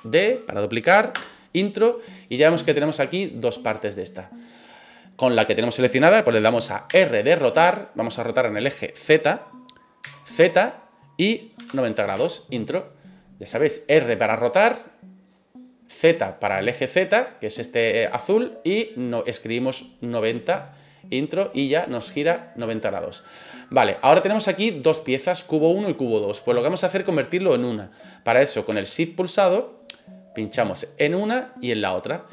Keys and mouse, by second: 1.1 Return, 6.9 r, 10.0 z, 11.6 KP_9, 11.7 KP_0, 12.1 KP_Enter, 13.5 middle click, 14.9 middle click, 21.7-22.9 middle drag, 23.8 right click, 30.6 shift+right click, 31.5 shift+right click.